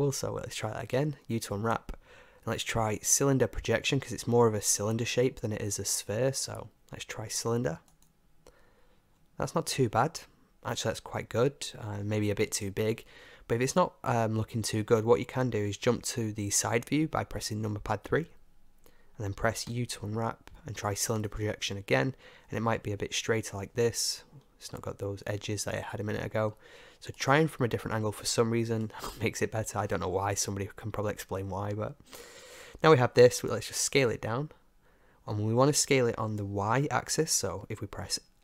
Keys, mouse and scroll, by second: 0.9 u, 6.1 u, 9.2-18.1 middle drag, 18.1 KP_3, 19.7 u, 24.0-30.6 middle drag, 34.3-37.4 middle drag, 34.3 s, 37.4-38.4 drag.